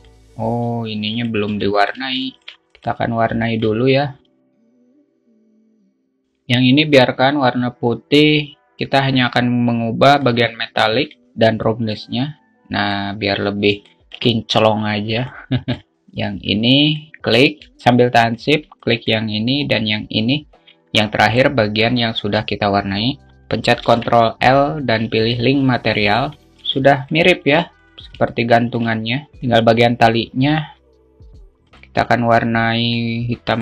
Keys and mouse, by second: 0.2-1.3 alt+middle drag, 1.5 alt+middle click, 3.9 alt+shift+middle drag, 5.3 click, 6.0-13.7 drag, 14.3-14.7 alt+shift+middle drag, 15.7 alt+middle click, 17.1-17.6 alt+middle drag, 19.3-20.1 alt+shift+middle drag, 20.1 shift+click, 24.3 ctrl+l, 27.7 alt+shift+middle click, 28.1 click, 28.8-29.2 alt+shift+middle drag, 32.1 click.